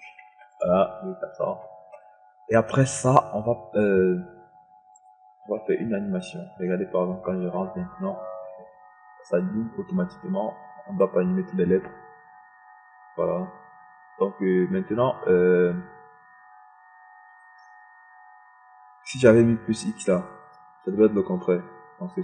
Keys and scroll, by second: 0.9 KP_4, 1.2 p.